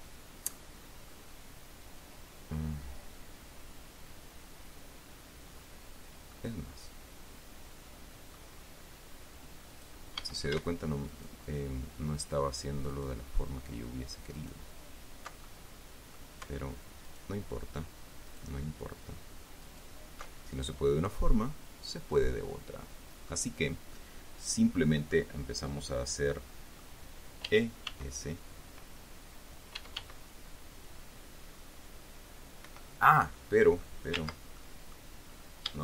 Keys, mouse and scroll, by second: 1.1 scroll up 2, 6.7-8.9 middle drag, 10.0 click, 10.5 a, 11.4 alt+shift+right click, 13.2 alt+shift+right click, 14.7 alt+shift+right click, 15.8 alt+shift+middle click, 17.4 alt+shift+right click, 18.6 alt+shift+right click, 20.0 alt+shift+right click, 20.7-21.0 alt+shift+scroll down 2, 21.1-23.8 drag, 24.3-25.6 drag, 26.6 click, 27.8 e, 28.2 s, 30.1 e, 30.3 s, 33.0 Escape, 33.7 click, 34.9 ctrl+z, 34.9 ctrl+middle click, 35.5-35.8 scroll up 2.